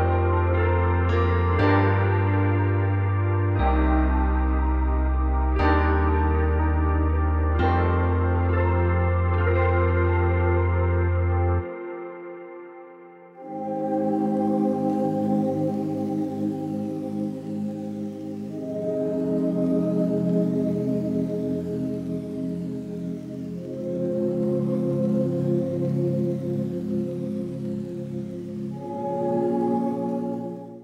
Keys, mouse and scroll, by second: 0.5 click, 1.2 Tab, 1.4-1.8 scroll down 2, 1.8-2.8 scroll up 2, 2.8 click, 3.9 z, 4.0 z, 4.8 scroll down 1, 4.9 middle click, 5.6-6.5 scroll up 3, 8.1-10.6 middle drag, 10.6 right click, 11.0-14.5 middle drag, 14.9-16.9 middle drag.